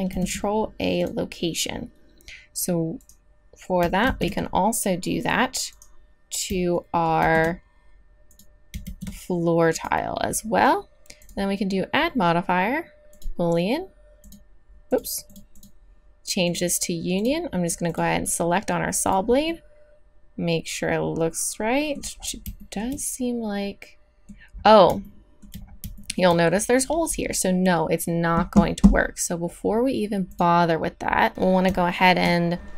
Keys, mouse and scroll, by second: 0.1 ctrl+a, 4.4 ctrl+z, 7.2 ctrl+a, 8.8 ctrl+a, 12.9 click, 14.2-19.5 drag, 19.5-21.1 middle drag, 22.2-22.7 middle drag, 25.7-30.3 middle drag, 30.3-31.3 drag, 31.3 Tab.